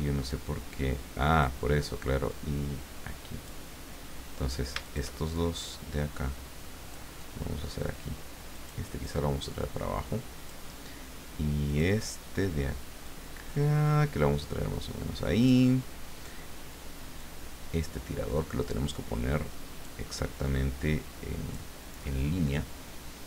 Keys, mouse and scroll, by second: 0.3-1.6 drag, 2.3-3.6 drag, 4.8 shift+click, 5.3-7.2 shift+drag, 8.5 click, 9.0-10.8 drag, 11.7 click, 13.0-15.6 drag, 17.2-20.1 drag, 20.4-21.7 drag.